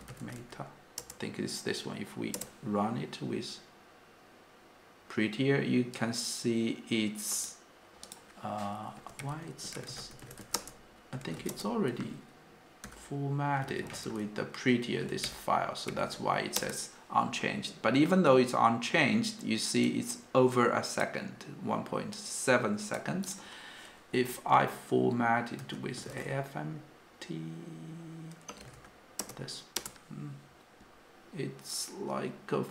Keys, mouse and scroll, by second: 10.7 typing, 10.8 Return, 12.5 Return, 13.0 u, 13.7 Escape.